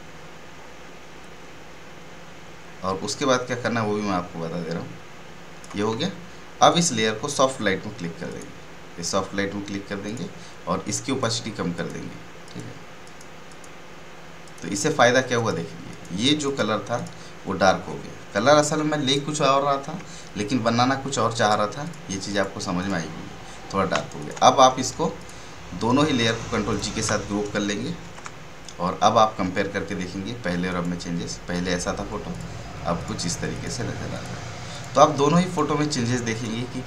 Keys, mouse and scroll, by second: 6.6 click, 17.8 alt+scroll down 1, 19.0 click, 21.3 click, 23.9 space, 24.1 click, 26.6 ctrl+click, 28.0 ctrl+g, 30.6 click, 31.0 click.